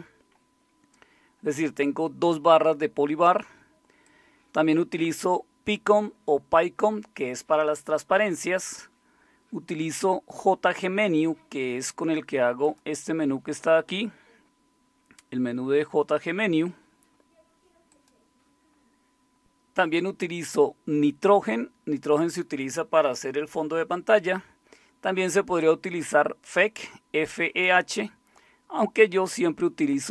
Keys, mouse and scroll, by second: 4.0-14.1 drag, 18.1-30.1 drag.